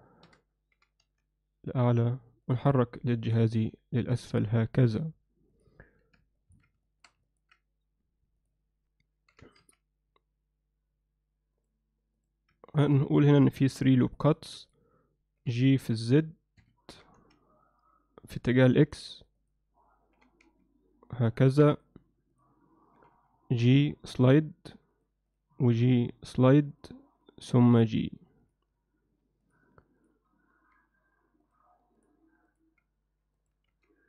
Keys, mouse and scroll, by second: 0.3 o, 0.8 g, 2.5 click, 2.7 click, 3.3 g, 6.4 ctrl+alt+middle click, 6.9 shift+middle click, 7.3 ctrl+alt+middle click, 9.3 g, 12.2 click, 12.8 ctrl+r, 14.7 click, 15.4 g, 16.9 g, 19.2 click, 19.4 click, 20.2 g, 23.0 g, 27.2 click, 27.4 g, 29.5 click, 30.0 click, 30.8 g, 32.0 click, 32.5 click, 32.8 g, 33.7 z.